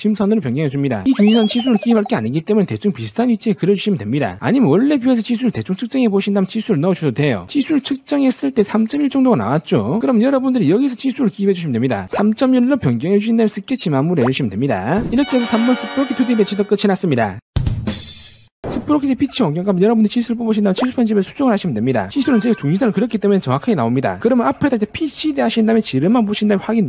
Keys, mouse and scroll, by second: 0.3-0.7 scroll down 1, 0.8 click, 1.1 click, 8.0 click, 8.6 click, 10.4 d, 11.1 click, 11.9 click, 12.6 3, 13.0 1, 13.9 click, 14.2 right click, 14.9 click.